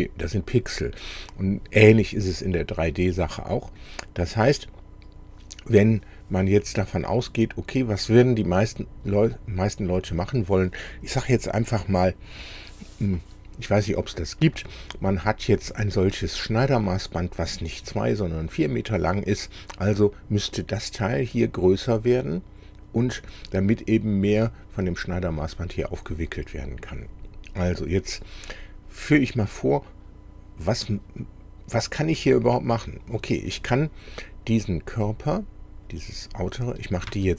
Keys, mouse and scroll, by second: 4.5 click, 4.8 middle click, 36.0 click, 36.8 click, 37.1 space.